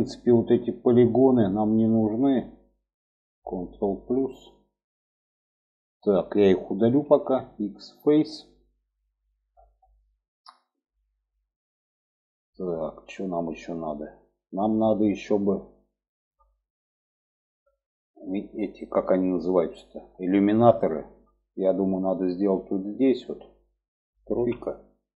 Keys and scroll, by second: 3.6 ctrl+KP_Add, 6.6 x, 23.9 3.